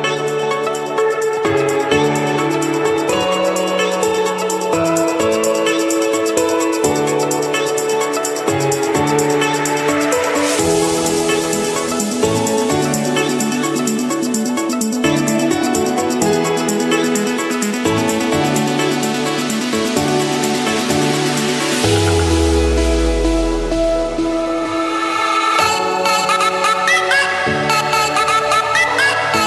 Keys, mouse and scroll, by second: 0.3 click, 1.6 click, 3.5-4.2 typing, 5.1 Return, 6.9-8.3 drag, 8.4-8.9 typing, 9.9 Return, 11.2-13.4 drag, 13.8 click, 15.2 m, 15.8 Return, 17.5 click, 19.0-20.1 drag, 20.7-21.3 typing, 22.6 Return, 23.8 click, 24.1 Return, 25.8-27.1 drag, 27.4-28.5 scroll, 28.5-29.0 scroll.